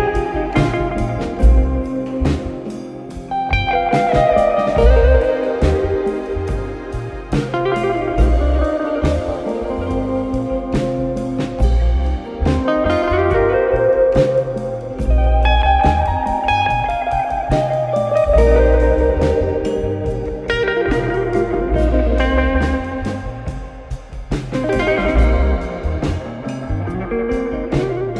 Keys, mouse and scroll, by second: 1.2 ctrl+z, 1.9 shift+click, 2.9 ctrl+b, 5.4 alt+click, 7.2 alt+shift+click, 8.3 ctrl+b, 10.0 Tab, 11.3 click, 14.0-15.1 scroll down 1, 15.1 click, 15.4-16.2 scroll down 1, 16.2 KP_1, 17.0 ctrl+KP_3, 17.5-18.2 scroll up 5, 18.2 click, 19.1 click, 20.2-21.7 drag, 21.7 shift+d, 27.2 shift+click.